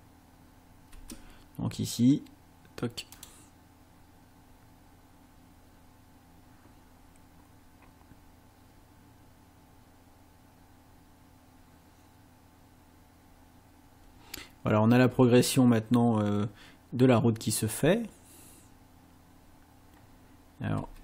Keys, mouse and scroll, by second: 1.0 space, 3.2 click, 20.8 space.